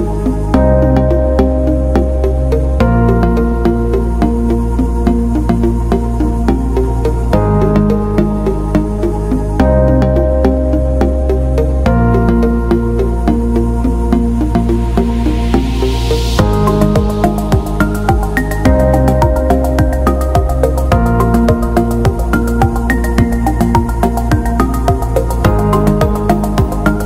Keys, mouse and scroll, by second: 0.7-2.3 scroll down 1, 2.7 click, 4.6 KP_3, 5.0 Return, 6.3 click, 14.2-14.8 alt+scroll up 1, 14.8 click, 15.1 click, 17.8 click, 18.4 alt+click, 20.2 alt+click, 21.8 click, 26.6 BackSpace.